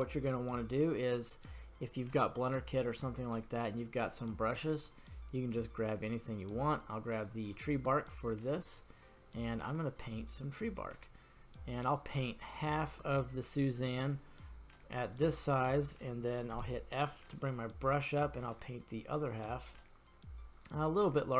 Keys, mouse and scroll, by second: 2.3 click, 8.3-12.0 drag, 12.2-13.1 scroll down 1, 13.1-15.2 drag, 15.4-15.9 middle drag, 16.5 f, 20.9 click.